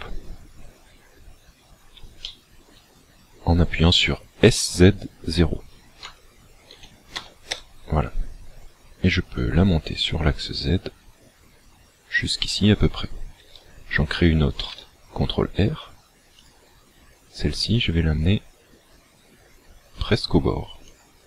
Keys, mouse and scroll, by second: 0.7-1.1 scroll up 2, 1.1 scroll down 1, 2.3 shift+middle click, 6.0 s, 9.4 click, 14.6 ctrl+r, 21.0 click.